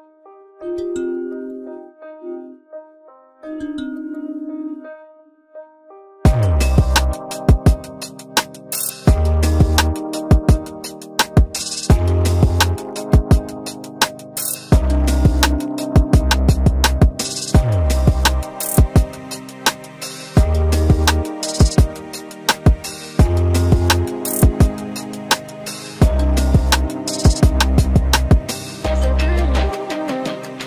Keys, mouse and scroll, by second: 9.0 Delete, 11.0 Delete.